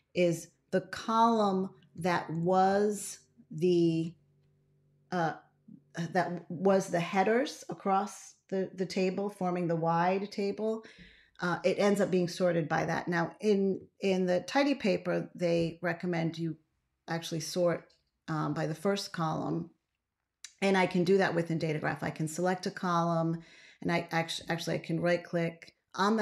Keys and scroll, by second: 0.0 ctrl+a, 2.5 ctrl+a, 13.9 ctrl+x.